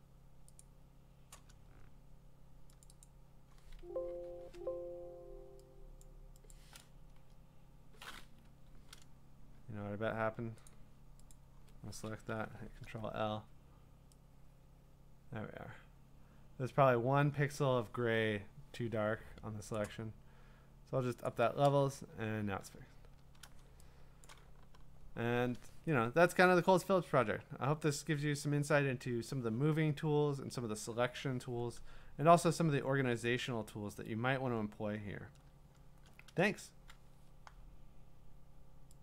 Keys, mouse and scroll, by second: 0.8 click, 2.8 click, 3.0 click, 3.8 Escape, 4.4 Escape, 6.0 click, 6.5 click, 8.4 Escape, 10.7 click, 11.3 click, 12.3 ctrl+i, 19.7 click, 21.3 click, 22.1-23.6 scroll, 24.3 click, 32.6-34.8 scroll, 34.8-35.4 scroll down 2, 35.4-35.8 scroll up 7, 36.6 scroll.